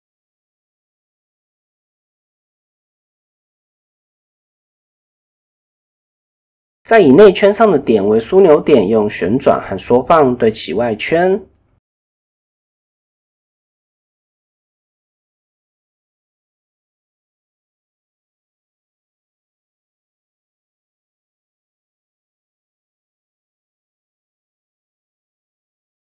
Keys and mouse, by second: 1.3-2.0 drag, 2.6 shift+click, 3.7 middle click, 5.4 KP_1, 6.6 middle click, 9.9 KP_1, 11.6 r, 12.9 shift+click, 13.6 shift+click, 14.2 s, 15.5 shift+middle click, 16.3 shift+middle click, 17.2 shift+middle click, 17.4 shift+middle click, 18.1 r, 20.2 s, 21.7 shift+click, 22.3 s, 24.5 shift+click, 25.9 r.